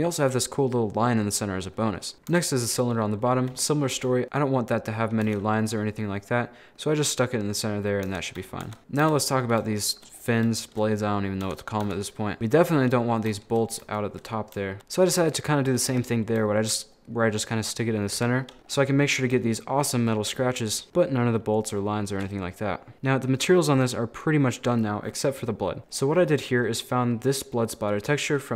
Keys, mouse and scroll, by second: 1.1 scroll down 5, 2.1 scroll up 1, 2.3 Tab, 2.8-3.5 scroll up 1, 3.7 a, 3.9 g, 4.2 s, 5.3 Tab, 5.8-8.1 middle drag, 8.1 Tab, 8.4 a, 8.7 Tab, 8.8 middle click, 9.0 KP_1, 9.5 scroll down 1, 9.8 shift+middle click, 10.2-10.5 scroll up 3, 10.6 shift+middle click, 11.1-11.5 scroll up 2, 11.5 Tab, 11.9 Tab, 13.3 shift+middle click, 13.9 a, 14.2 scroll down 3, 14.8 Tab, 15.2 a, 15.7 middle click, 15.9-16.5 scroll up 11, 16.5 shift+middle click, 17.2-17.6 scroll down 3, 17.6 middle click, 18.2 Tab, 18.5 shift+middle click, 18.8 scroll up 2, 19.4 shift+middle click, 20.3 scroll down 3, 20.4 shift+middle click, 20.9 scroll down 1, 21.0-22.4 middle drag, 22.4 scroll down 1, 22.4-25.4 middle drag, 25.8 click, 25.9 scroll down 6, 26.1 middle click, 26.7 scroll up 2, 26.8 middle click, 27.3 scroll down 3, 27.4 middle click, 27.8-28.5 scroll up 1.